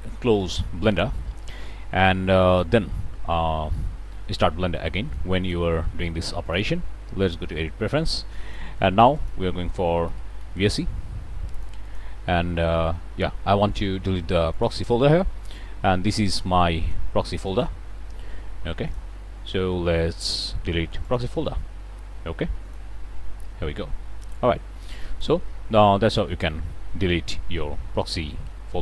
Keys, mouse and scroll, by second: 2.4 click, 5.0 click, 5.4 click, 6.4 click, 7.2 click, 8.3 click, 9.1 click, 10.0 v, 10.1 s, 10.3 e, 11.5 click, 14.5 click, 15.4-17.1 drag, 17.4 right click, 18.8 click, 21.0 click, 22.6 click, 24.2-25.4 drag.